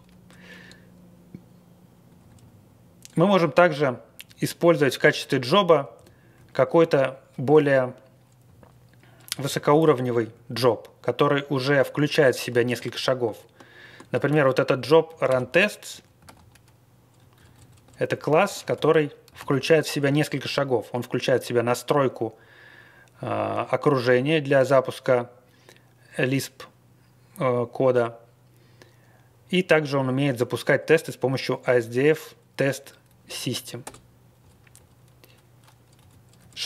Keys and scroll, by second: 2.0 Up, 2.2 Up, 5.3 Left, 5.6 Left, 5.6 Left, 5.6 Left, 5.9 Left, 6.3 Right, 6.9-7.5 Up, 8.4 Left, 9.2 Left, 9.4 Left, 9.5 Left, 10.2 Right, 12.5 ctrl+space, 14.1 ctrl+space, 14.2 ctrl+e, 14.7 Left, 15.0 Right, 15.2 ctrl+space, 15.3 Left, 15.6 Left, 15.6 Left, 15.7 Left, 15.7 Left, 15.8 Left, 15.8 Left, 16.2 w, 16.3 Down, 16.6 Down, 16.6 Down, 16.7 Down, 16.7 Down, 16.7 Down, 16.8 Down, 16.9 Down, 16.9 Down, 16.9 Down, 17.0 Down, 17.1 Down, 17.1 Down, 17.3 Up, 17.5 Up, 17.6 Up, 17.8 Up, 18.1 Right, 18.3 Left, 18.7 ctrl+y, 19.3 alt+d, 20.1 Down, 33.0 Up, 33.8 Return, 34.3 Down, 34.7 Up, 35.9 Page_Down.